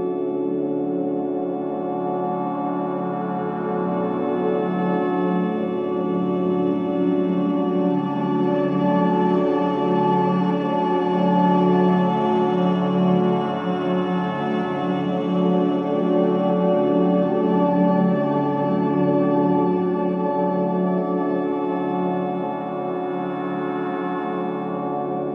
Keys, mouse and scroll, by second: 0.0 click, 1.5 scroll down 1, 1.9-2.6 scroll up 1, 2.7 scroll down 1, 3.1-3.9 scroll up 1, 3.9-5.5 drag, 5.3-6.8 typing, 7.8 Return, 8.6 click, 9.2 scroll up 1, 9.9 click, 10.4-10.8 scroll down 1, 12.4-17.0 drag, 16.8-18.3 typing, 19.5 click, 22.0-22.4 scroll up 1, 22.4-24.1 drag, 24.1 scroll up 1, 24.5-25.1 scroll down 1.